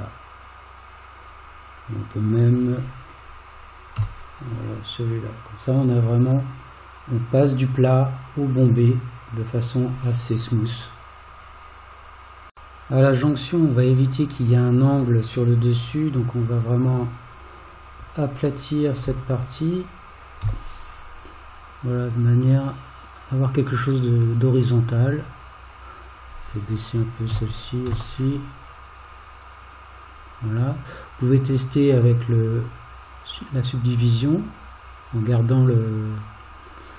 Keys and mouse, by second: 1.8 click, 4.0 g, 13.3 click, 19.1 g, 25.5 click, 27.3 g.